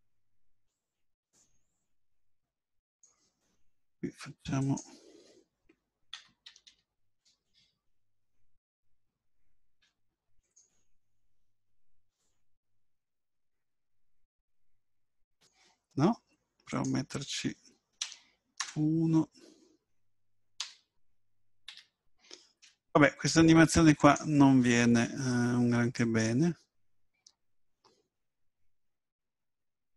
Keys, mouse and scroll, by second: 1.6 click, 9.8 i, 12.1 click, 16.7 click, 22.6 i, 26.0 click.